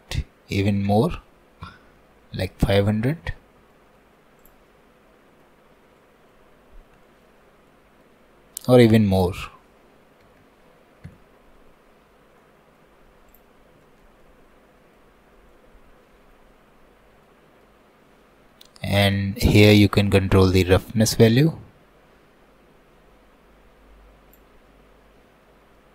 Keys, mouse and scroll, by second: 1.1 KP_0, 2.9-3.8 scroll down 4, 3.8 shift+middle click, 4.4 click, 4.7-6.6 middle drag, 6.6-7.1 scroll up 3, 7.1 shift+middle click, 7.5 scroll up 1, 7.7-9.2 middle drag, 9.2-10.4 drag, 10.4 KP_0, 12.0-12.4 scroll down 5, 12.4 middle click, 13.3 click, 13.6 scroll up 1, 13.9-15.2 shift+middle drag, 15.2-15.5 scroll up 1, 15.5-18.2 middle drag, 18.2 scroll up 2, 18.5-20.4 middle drag, 20.4-25.4 drag, 25.4-25.8 scroll down 1, 25.8 middle click.